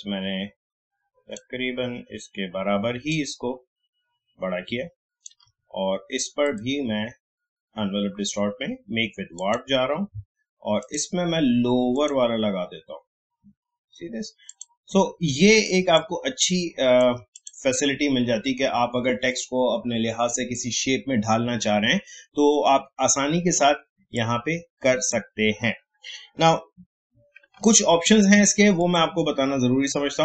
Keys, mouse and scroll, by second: 9.3-17.3 drag, 24.1-28.8 drag.